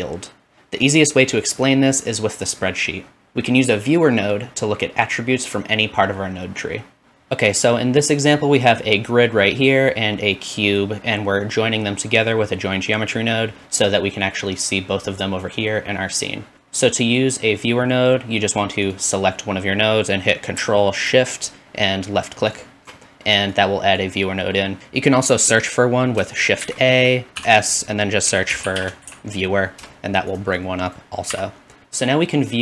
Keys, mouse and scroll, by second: 16.5 click, 22.5 ctrl+shift+click, 23.7-24.8 drag, 23.8-24.5 typing, 26.6 shift+a, 30.9 click, 31.3 x, 31.8-32.6 drag.